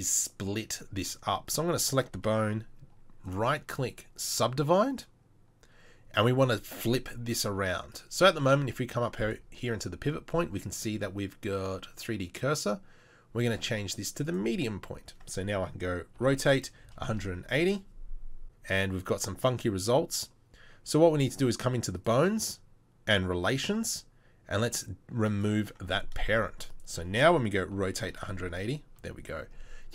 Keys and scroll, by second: 16.2 r, 17.1 r, 27.7 r.